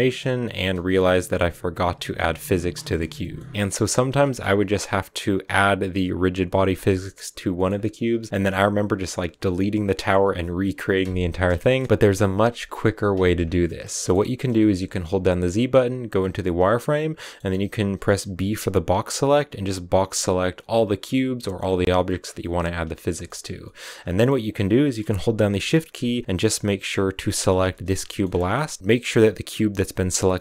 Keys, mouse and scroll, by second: 0.6 space, 2.6-6.7 middle drag, 6.7 click, 7.3-13.2 middle drag, 13.2 scroll down 2, 13.5-21.6 shift+middle drag, 21.6 scroll up 3, 21.8-23.7 shift+middle drag, 23.7 scroll up 3, 24.0-26.6 middle drag, 26.6-27.8 shift+right drag, 27.8 shift+middle click, 28.0-30.0 scroll up 5, 30.0-30.4 scroll up 1.